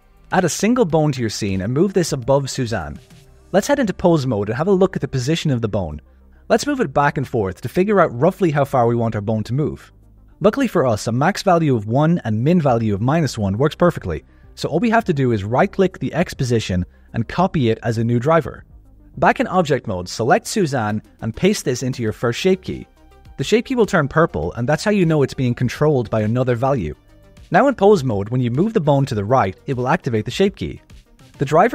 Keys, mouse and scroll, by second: 0.0 shift+a, 1.2 g, 2.2 ctrl+middle click, 2.7 alt+a, 4.7 click, 5.2 click, 6.3 click, 6.7 g, 15.5-17.3 right drag, 19.3-20.7 drag, 22.3-23.5 right drag, 26.1 click, 26.7 click, 27.9 g, 31.0 click.